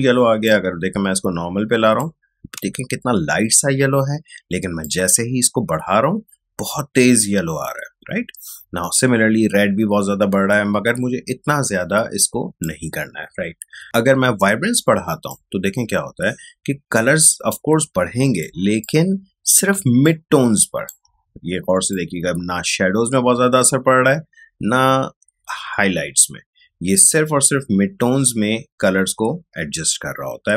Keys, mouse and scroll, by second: 0.4-2.6 drag, 2.6 space, 4.8-18.5 drag, 18.5 ctrl+space, 18.8 ctrl+click, 19.0 ctrl+space, 20.0 click, 20.2 space, 21.8 click, 21.9-30.5 drag.